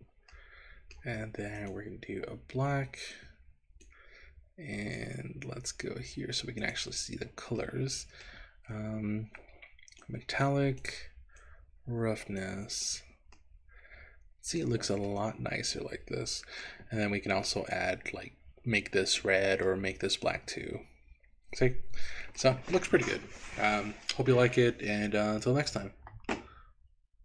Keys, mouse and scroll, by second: 0.4 middle click, 1.6 click, 6.8 click, 7.7 middle click, 10.1 click, 11.5-12.6 drag, 12.9 click, 13.5-14.7 middle drag, 15.3-16.8 middle drag, 19.7-22.5 middle drag, 23.6-27.1 scroll down 4.